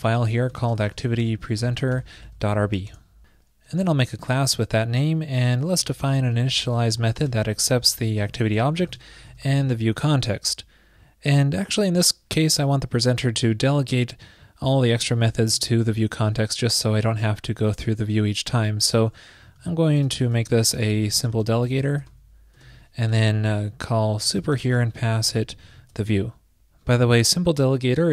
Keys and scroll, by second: 1.6 shift+super+n, 19.7 super+Right, 26.0 super+Return.